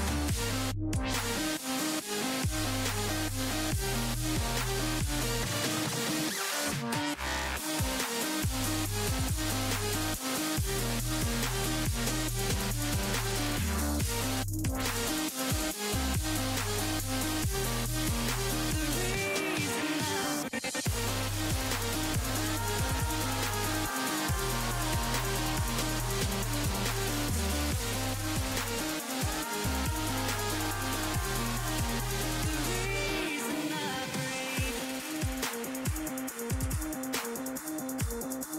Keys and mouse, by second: 2.0 s, 11.3 Tab, 13.0-14.7 drag, 14.5 z, 17.8 z, 20.5 z, 23.0 z, 31.4-33.5 drag, 31.4-32.8 middle drag, 31.4-32.8 right drag, 33.5 Tab, 37.1 Tab.